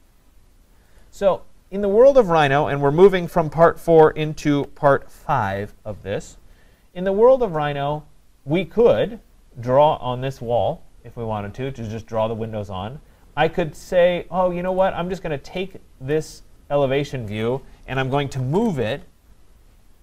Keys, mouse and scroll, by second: 1.0 click, 1.4-1.9 scroll, 6.7 scroll, 7.4-10.2 scroll, 14.8 click, 16.1 click, 17.9-19.0 typing.